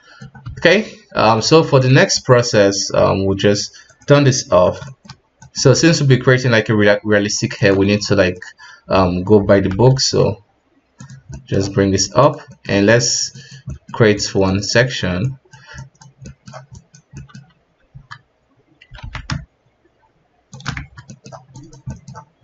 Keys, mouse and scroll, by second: 0.4 KP_3, 1.6 right click, 3.8 click, 4.4-5.3 scroll up 4, 4.8-5.1 shift+middle drag, 5.4 right click, 5.7 ctrl+Tab, 8.0-9.6 middle drag, 9.6 F7, 11.3 middle click, 11.7 f, 12.4 middle click, 12.9 click, 13.6 middle click, 14.1-16.2 drag, 16.2 middle click, 16.7 click, 17.1 middle click, 17.9 Tab, 19.0 alt+s, 20.8 Tab, 21.1 middle click, 21.5 click, 21.9 middle click.